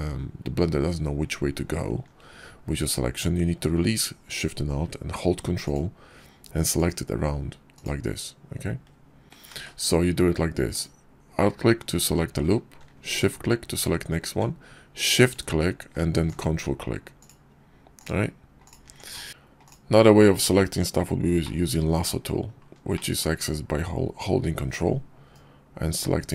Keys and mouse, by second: 5.5 ctrl+click, 7.6 ctrl+click, 9.4 ctrl+z, 13.0 alt+shift+click, 15.0 shift+click, 15.3 shift+click, 16.1 ctrl+click, 17.0 ctrl+click, 18.5 ctrl+click, 19.3 ctrl+z, 19.5 click, 21.3 click, 21.7 middle click, 22.8 middle click, 25.3 ctrl+click.